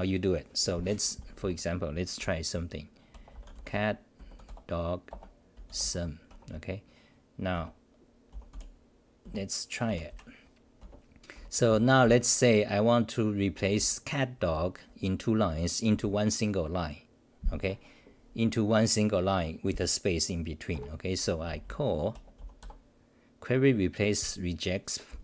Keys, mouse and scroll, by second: 1.2-3.1 typing, 3.7 Return, 6.3 Home, 6.3 Return, 9.2 t, 9.8 ctrl+=, 10.1 ctrl+=, 10.8 -, 11.3 t, 11.7 t, 12.0 t, 13.3-14.5 typing, 21.4 ctrl+g, 21.4 c, 21.6 c.